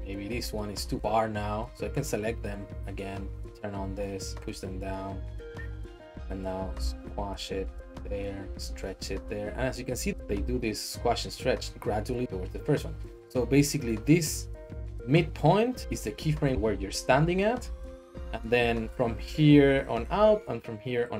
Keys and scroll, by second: 4.3 g, 6.6 s, 8.4 s, 8.6 z, 10.3 z.